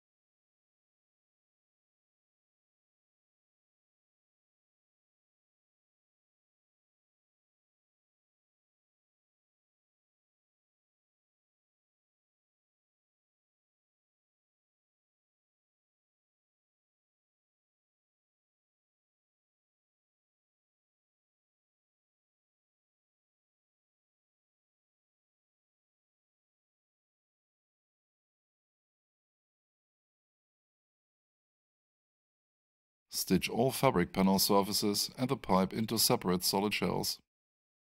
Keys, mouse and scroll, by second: 0.2 alt+shift+click, 1.0 alt+shift+middle click, 2.6 alt+shift+click, 3.1 alt+shift+right click, 7.7 click, 20.6 click, 21.2 alt+shift+right click, 22.7 alt+shift+middle click, 31.0 right click, 35.0 space.